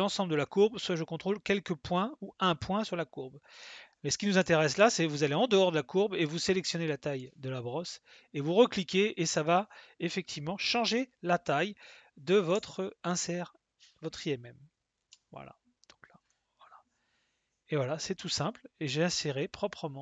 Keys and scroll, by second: 12.5 s.